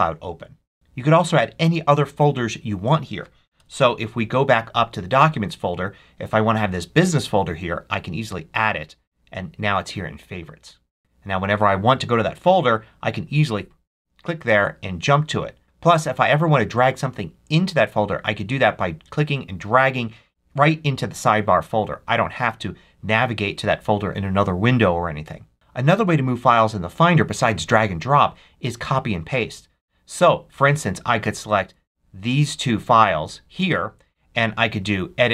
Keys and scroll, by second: 3.5 super+Up.